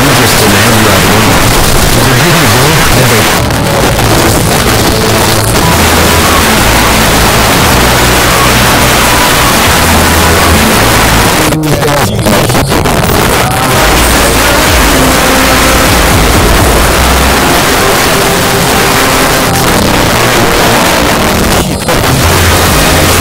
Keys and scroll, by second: 3.2 Page_Down, 11.3 Page_Down, 19.5 Page_Down.